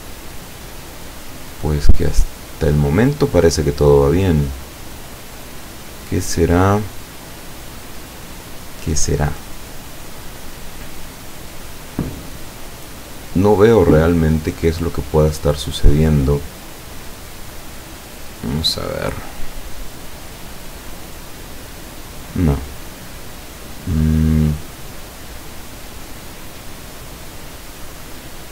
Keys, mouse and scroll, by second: 8.4-11.7 drag, 18.3 click, 23.9 click.